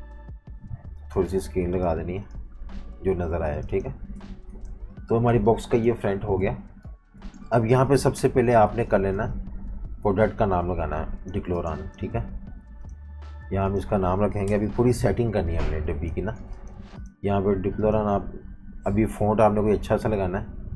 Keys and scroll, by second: 4.4 super+-, 4.6 super+-, 5.4 space, 6.4 v, 7.2 v, 8.7 typing, 11.5 typing, 14.4 shift+super+], 15.0-17.4 typing.